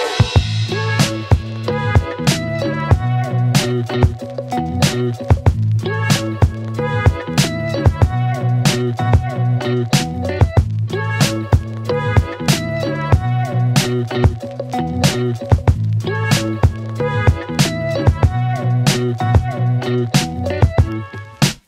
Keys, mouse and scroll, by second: 6.5 click, 9.8 ctrl+d, 12.6-14.8 drag, 18.2 click, 19.2 Return, 20.5-21.6 click.